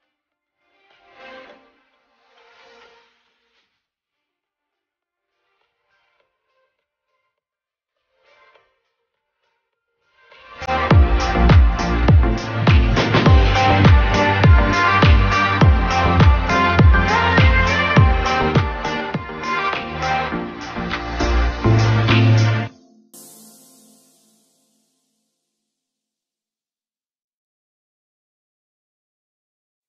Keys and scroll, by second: 1.5 ctrl+z, 7.6 shift+space, 10.0 shift+space, 18.8 shift+space, 27.0 ctrl+c.